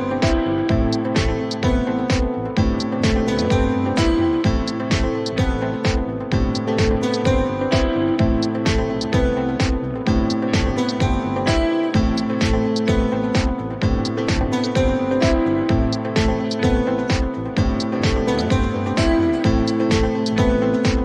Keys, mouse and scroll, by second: 0.3 click, 3.0 click, 4.9 click, 6.2 click, 7.4 click, 8.6 click, 9.4 click, 11.1 click, 12.3-13.3 drag, 13.6 click, 14.8-16.5 drag, 17.4 click, 18.5-21.0 drag.